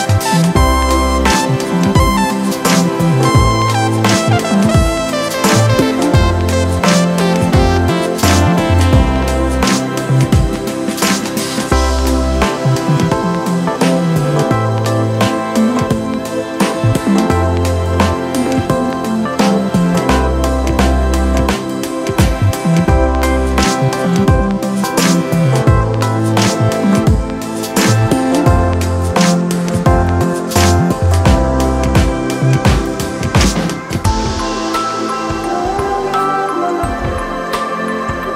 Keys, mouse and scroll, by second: 1.3 ctrl+z.